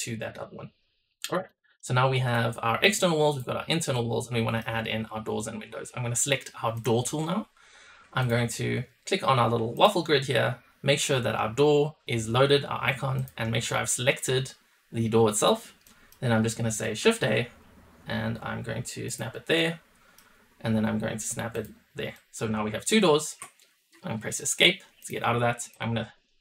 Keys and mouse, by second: 1.4 middle drag, 2.2 click, 3.2 drag, 3.9-4.5 middle drag, 6.7 click, 8.1 click, 9.8-15.5 drag, 15.8 middle drag, 17.0 shift+a, 19.5-23.4 drag, 24.2 shift+middle click, 25.0 click, 25.7-26.4 drag.